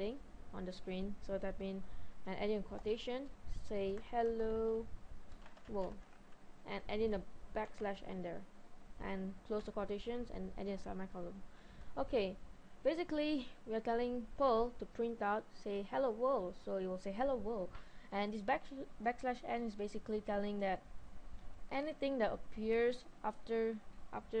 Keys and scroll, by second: 2.9 typing, 4.0-6.2 typing, 7.7 typing, 9.6 typing, 10.7 typing, 11.8 Left.